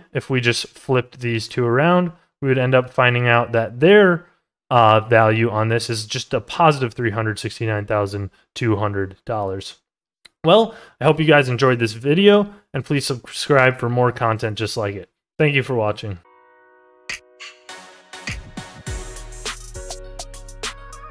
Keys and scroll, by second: 8.0 ctrl+z.